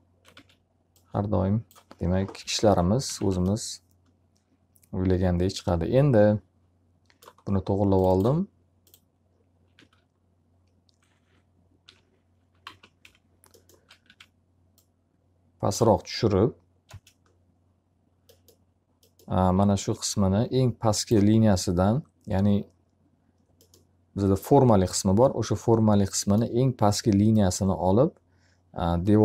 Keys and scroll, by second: 0.3 w, 2.3 p, 3.0 z, 9.3 alt+a, 11.7 l, 12.5 z, 12.9 F3, 13.9 w, 16.8 space, 19.5 s.